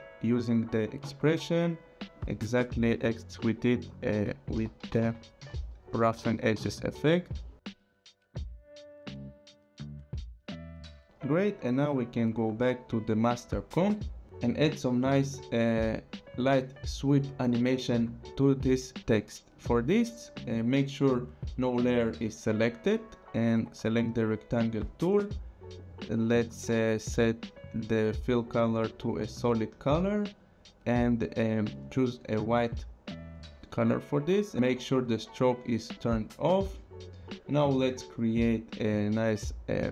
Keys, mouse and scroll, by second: 1.7 alt+click, 4.3-6.1 typing, 7.7 click, 9.7 click, 12.4 click, 13.9 click, 14.9 click, 16.4 click, 21.6 click, 24.0 click, 25.8 click, 29.2 click, 31.3 click, 32.3 click, 33.6 click, 34.5 click, 35.9 click, 38.6 click.